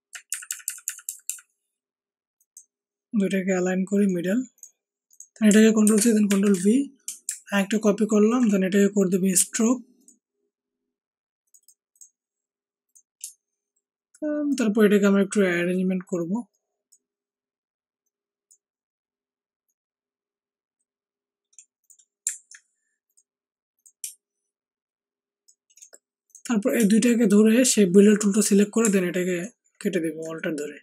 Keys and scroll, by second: 0.2 Up, 0.4 Up, 0.6 Up, 1.2-1.9 Up, 5.8 ctrl+c, 6.2 ctrl+shift+v, 7.0 ctrl+shift+v.